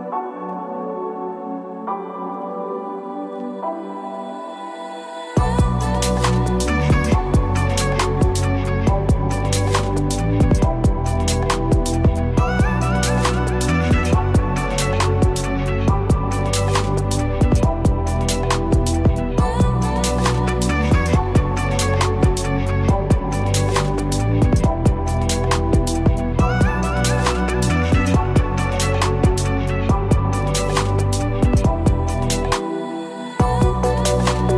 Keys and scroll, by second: 8.1 ctrl+z, 19.2 ctrl+z, 33.6 ctrl+-.